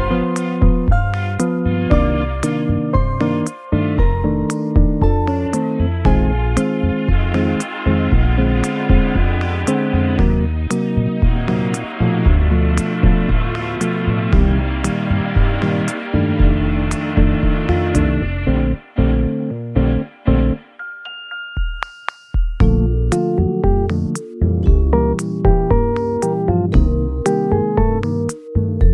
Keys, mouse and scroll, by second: 2.8 alt+z, 3.1 alt+middle click, 5.1 alt+z, 5.5 alt+middle click, 8.5 e, 11.0 shift+middle click, 11.8 middle click, 11.8 scroll up 1, 12.2 alt+z, 14.3 shift+middle click, 14.7 alt+z, 15.9 scroll up 1, 15.9 middle click, 17.0 m, 17.0 g, 21.9 middle click, 22.8 middle click, 23.4 g, 24.7-26.2 scroll up 11, 26.7-27.4 scroll down 6, 28.0 scroll up 3.